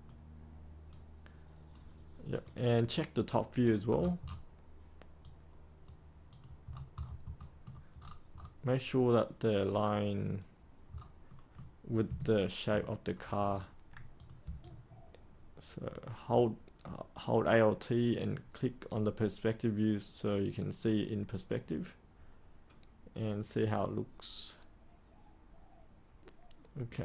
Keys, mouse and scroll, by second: 0.9 click, 3.1-3.6 scroll up 1, 3.6 click, 3.9-5.1 scroll down 1, 5.1 click, 6.6-7.0 scroll down 1, 7.3 middle click, 7.9-10.9 scroll up 1, 10.9-11.3 scroll down 1, 11.3 middle click, 12.1 ctrl+right click, 13.1 scroll down 1, 13.4 scroll up 1, 14.1 click, 14.6-26.9 alt+drag.